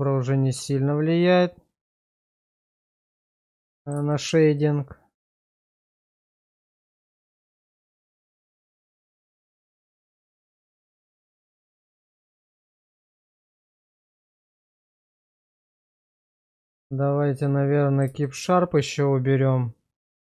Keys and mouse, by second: 2.6 shift+middle drag, 3.4-3.9 middle drag, 4.1 shift+middle drag, 4.6-9.3 middle drag, 9.6 shift+middle drag, 14.0 click, 15.8 shift+middle click, 16.3-18.0 middle drag, 18.2 shift+middle click, 18.7-20.2 middle drag.